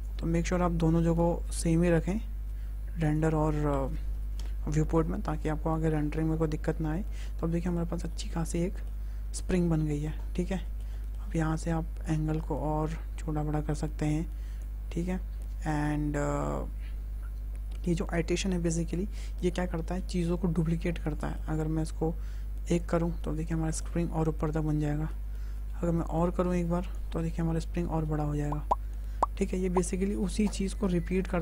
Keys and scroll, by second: 0.6 KP_3, 0.9 KP_0, 1.3 Return, 3.5 KP_3, 3.8 KP_0, 4.3 Return.